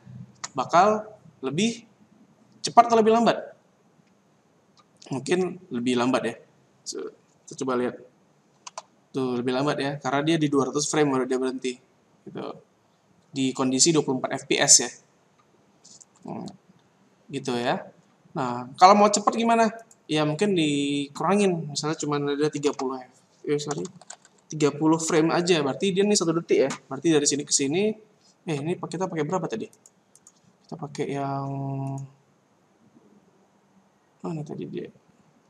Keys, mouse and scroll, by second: 8.5 alt+a, 17.5 Escape, 19.8 click, 23.8 BackSpace, 24.0 BackSpace, 24.2 BackSpace, 30.1 click, 30.2 click, 31.8 click, 31.9 click, 34.5-34.9 scroll down 3, 34.9-35.4 scroll up 3.